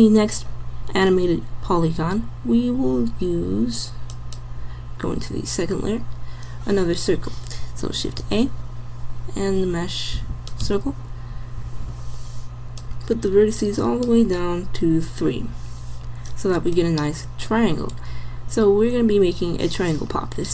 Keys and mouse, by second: 8.2 shift+a.